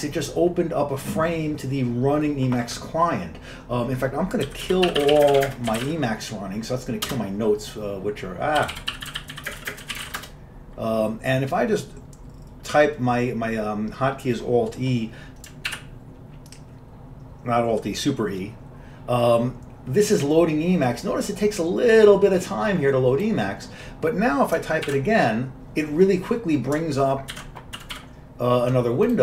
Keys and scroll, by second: 4.3-6.7 typing, 7.2 Return, 8.5-10.8 typing, 15.8 super+e, 25.0 super+e, 27.4 ctrl+x, 27.6-28.5 typing.